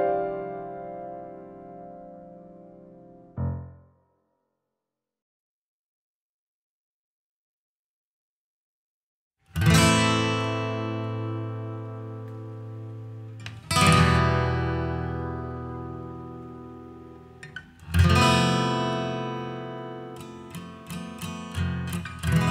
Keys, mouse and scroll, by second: 4.1-5.1 scroll up 3, 5.1 click, 7.5 click, 11.3-11.7 scroll up 5, 11.8 middle click, 12.3-13.0 scroll up 2, 13.0 click, 20.5-21.2 scroll down 1, 21.2-22.5 scroll down 1.